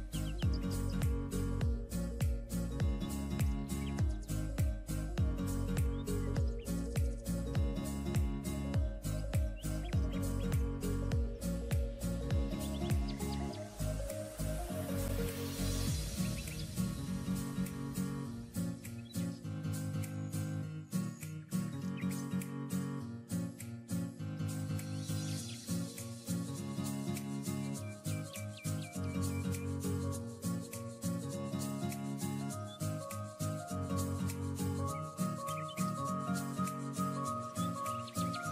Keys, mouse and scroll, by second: 4.1 alt+scroll down 1, 5.2 ctrl+d, 5.7-6.2 scroll down 2, 7.2 double click, 9.3-9.7 alt+scroll up 1, 9.8 alt+scroll down 1, 13.6-14.3 scroll down 1, 35.8-36.4 alt+scroll down 1.